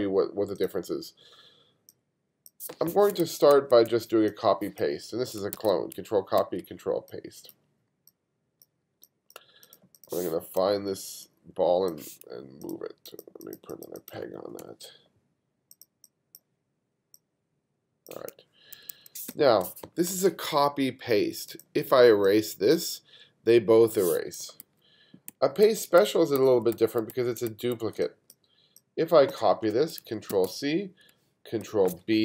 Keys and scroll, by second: 3.2 super+z, 5.6 super+c, 6.4 super+v, 9.1 space, 14.6 super+p, 18.8 2, 19.3 space, 24.7 super+z, 25.3 super+z, 28.0 space, 30.3 super+c, 31.6 super+b.